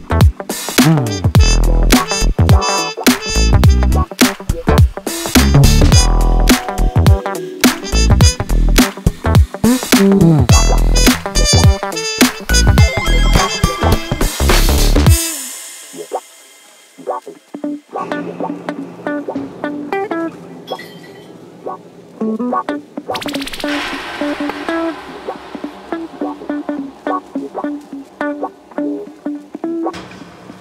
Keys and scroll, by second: 2.2 2, 10.6 ctrl+z, 12.7 ctrl+z, 21.4 4, 23.3 ctrl+z, 26.4 F3, 28.0 F1, 28.2 F2.